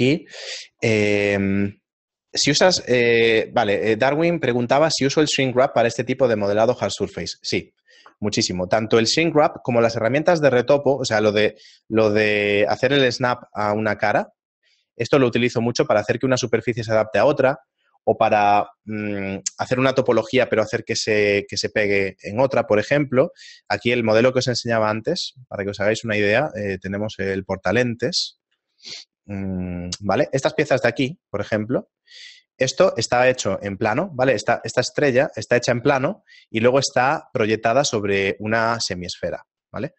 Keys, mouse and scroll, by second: 12.7 click, 13.1 click, 18.8 click.